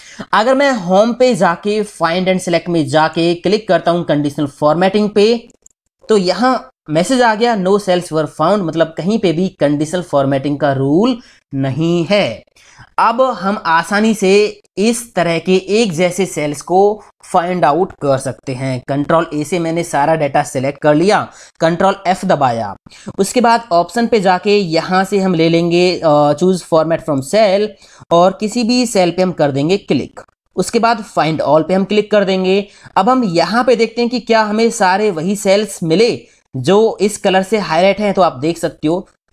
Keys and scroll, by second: 19.4 ctrl+a, 21.8 ctrl+f.